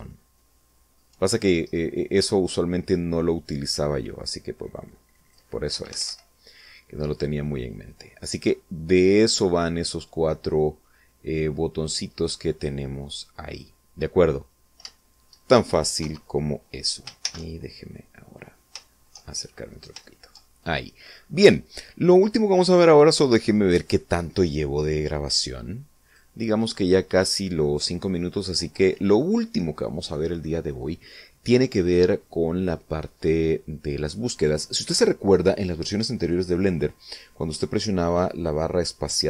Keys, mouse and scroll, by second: 1.1 ctrl+scroll down 1, 1.5 scroll up 1, 1.8 scroll down 1, 4.4 click, 5.6 Escape, 6.1 middle click, 7.0 scroll down 2, 8.2 click, 10.0-10.4 scroll down 2, 10.7-11.8 middle drag, 11.8 scroll up 1, 12.0 scroll down 1, 12.7 scroll down 1, 13.4-14.1 scroll down 3, 14.3 middle click, 15.8 0, 17.1 shift+c, 17.6 shift+middle click, 18.6 shift+middle click, 19.5 shift+scroll up 2, 19.9 shift+middle click, 21.0-21.3 shift+scroll up 3, 25.2 click, 25.9 click.